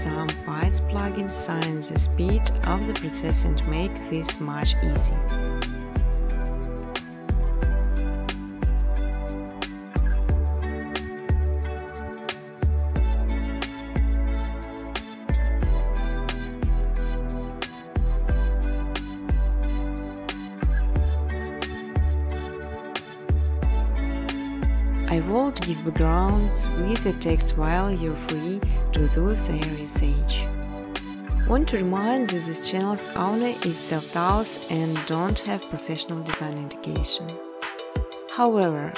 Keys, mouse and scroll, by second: 1.2-1.9 typing, 2.6 Tab, 3.2 Tab, 3.5 Tab, 4.1-4.9 typing, 8.9 1, 10.0-11.7 typing, 12.8-14.5 typing, 16.2 typing, 18.9-19.9 drag, 19.9 typing, 23.7 click, 24.5-27.5 typing, 25.7 Tab, 28.5 Return, 29.7 typing, 30.5 alt+click, 31.0-34.9 typing, 34.4 click, 35.9 space, 37.5 alt+click, 38.1-38.9 typing.